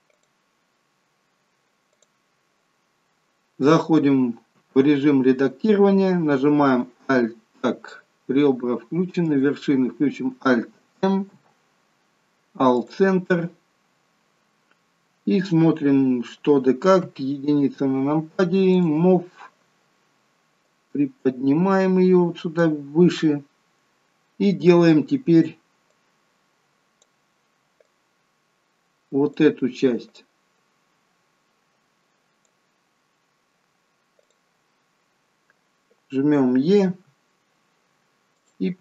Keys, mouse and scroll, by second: 1.9 click, 4.5 Tab, 9.2 click, 11.2 alt+m, 16.9 KP_1, 18.7 click, 20.5 click, 23.1-23.6 scroll up 3, 24.0-25.8 scroll down 1, 25.8 click, 27.8 click, 30.0 click, 34.2 click, 36.8 e, 38.7 e.